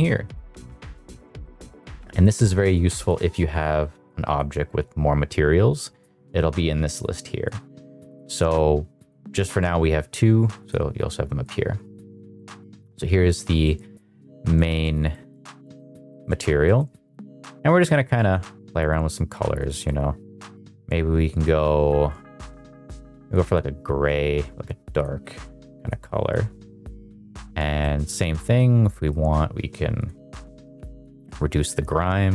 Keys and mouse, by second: 0.2 click, 0.6 click, 0.9 click, 1.3 click, 2.1 click, 4.1 drag, 7.0 click, 7.4 click, 8.0 click, 8.4 click, 9.0 click, 9.3 click, 10.6-11.2 drag, 12.3 middle click, 13.6 middle click, 14.4 shift+middle click, 14.6 shift+middle click, 15.0 middle click, 15.4 shift+middle drag, 15.7 shift+middle click, 16.0 shift+middle drag, 16.6 middle click, 19.5-25.7 drag, 26.0 click, 27.7 middle click, 28.9 middle click, 30.0-31.1 drag, 32.2-32.3 drag.